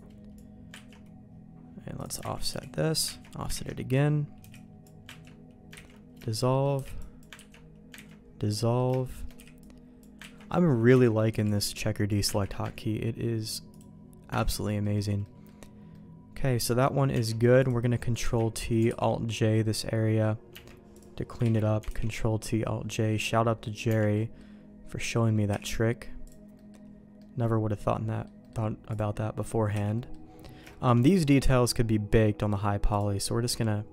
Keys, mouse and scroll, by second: 0.8 ctrl+q, 1.9 click, 2.2 ctrl+x, 2.5 b, 3.2 ctrl+q, 3.5 ctrl+x, 3.7 middle click, 4.4 b, 5.2 ctrl+q, 5.8 ctrl+x, 6.2 shift+middle click, 6.5 middle click, 6.7 b, 7.3 ctrl+q, 8.0 ctrl+x, 8.4 middle click, 8.9 shift+middle click, 9.3 b, 10.3 ctrl+q, 10.9 ctrl+x, 11.3 b, 12.3 ctrl+q, 13.7 click, 14.5 ctrl+x, 14.6 middle click, 15.2 middle click, 15.9 middle click, 17.1 Tab, 17.6 click, 18.2 ctrl+t, 18.8 alt+j, 19.3 middle click, 20.5 Tab, 20.9 click, 21.4 ctrl+t, 21.8 alt+j, 22.9 middle click, 23.8 Tab, 24.1 middle click, 25.5 h, 26.2 click, 26.5 middle click, 27.1-28.2 middle drag, 28.4 middle click, 28.9 click, 29.7 h, 29.9 middle click, 30.7 shift+middle click, 32.9-33.9 drag.